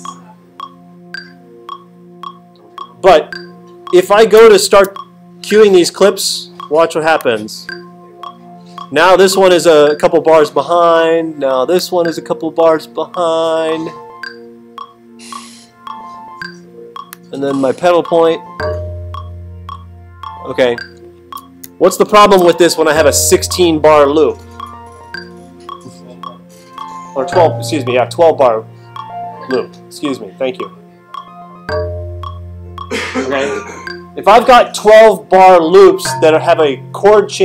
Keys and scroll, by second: 4.6 alt+super+8, 21.6 alt+super+8.